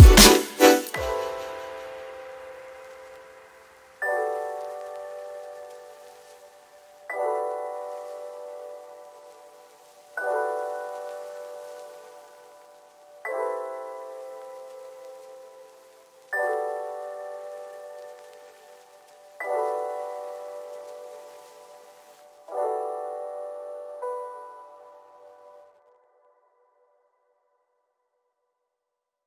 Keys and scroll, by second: 12.6 ctrl+KP_Subtract, 15.9 ctrl+shift+F7, 16.9 b, 28.5 ctrl+KP_0.